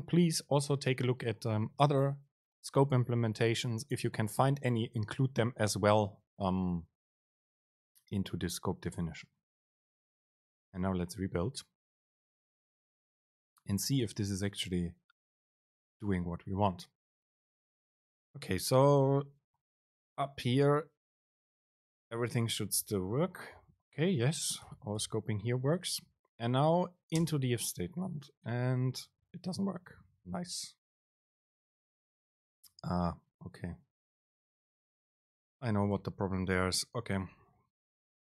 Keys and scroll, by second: 20.8 End, 22.2 super+space, 25.1 BackSpace, 25.7 Down, 27.4 super+space, 33.1 End, 33.7 Down, 34.6 End, 36.3 super+space.